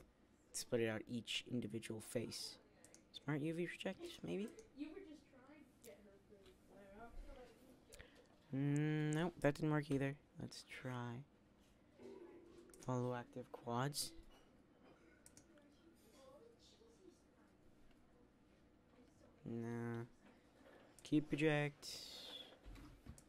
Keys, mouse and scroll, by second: 9.3 u.